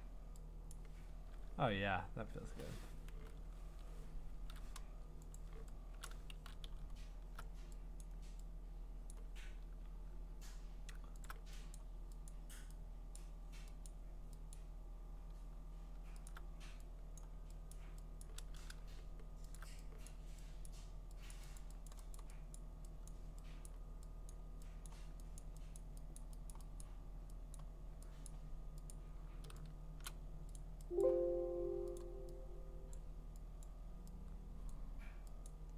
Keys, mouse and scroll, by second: 1.4 click, 1.4 middle click, 1.6 middle click, 1.7 middle click, 1.8-3.5 scroll, 3.5 ctrl+z, 4.3 ctrl+z, 5.4 click, 6.1 click, 6.3 ctrl+z, 6.8-8.0 scroll, 8.0 click, 9.1 click, 11.2 alt+click, 11.7 click, 12.3 click, 12.4 alt+click, 13.2 click, 13.9 click, 14.3 alt+click, 14.5 click, 16.3 alt+click, 17.2 click, 17.7 click, 18.2 click, 19.3 alt+click, 19.6-22.7 alt+click, 20.1 click, 20.7 click, 21.3 click, 21.6 click, 21.9 click, 22.2 click, 22.6 click, 23.1 click, 24.3 click, 24.9 click, 25.4 click, 25.8 click, 26.2 click, 26.5 click, 26.8 click, 27.6 click, 28.3 click, 28.9 click, 30.1 click, 30.6 click, 31.0 click, 32.0 click, 32.9 click, 33.6 click, 34.7 click, 35.5 click.